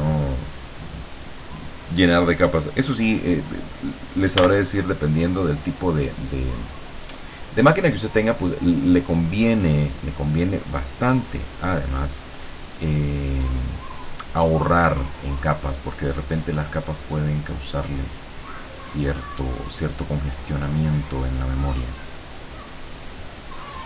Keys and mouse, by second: 0.3 click, 4.4 b, 6.6-8.8 drag, 13.0 click, 15.6 click, 17.8 click, 18.2 click, 19.4 click, 20.6-23.4 drag.